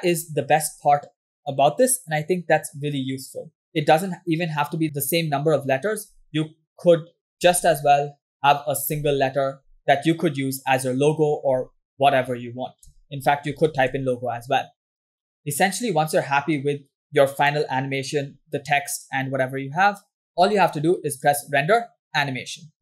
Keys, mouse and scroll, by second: 3.7-4.9 drag, 5.6 click, 7.3 Tab, 8.4 BackSpace, 9.4 Tab, 9.9 scroll up 3, 10.7 scroll up 1, 11.0-12.7 scroll down 5, 12.7 Tab, 13.0 BackSpace, 14.0 shift+l, 14.5 shift+o, 14.5 shift+g, 15.3 Tab, 16.9-18.8 drag, 21.2-22.8 drag.